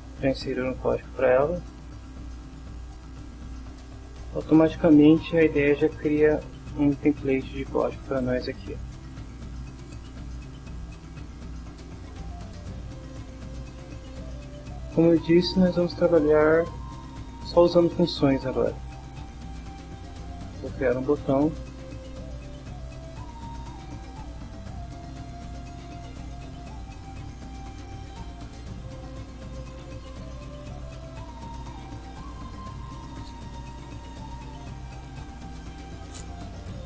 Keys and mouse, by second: 1.7 click, 2.9-4.0 drag, 6.0-7.0 drag, 8.1 BackSpace, 9.2 Down, 9.7 Up, 12.3 click, 13.1-14.2 middle drag, 19.5 click, 20.1 click, 21.0-22.0 typing, 23.5 click, 25.3-26.4 drag, 26.7 click, 27.4 click, 28.8 click, 29.9-31.4 typing, 33.3 click, 34.2 click, 35.5-36.7 drag.